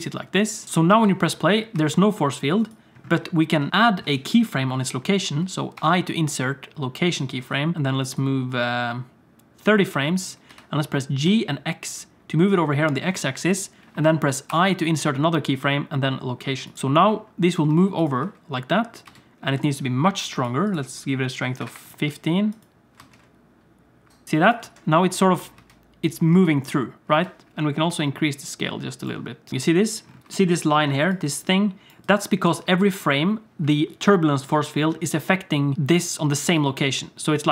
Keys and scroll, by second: 0.6 g, 0.9 space, 1.9 space, 3.7 alt+a, 5.8 i, 7.7 ctrl+z, 10.5 g, 14.5 i, 16.7 space, 17.7 space, 18.2 space, 19.1 space, 23.0 space, 24.2-27.1 typing, 31.0-32.6 typing, 36.4-37.5 typing.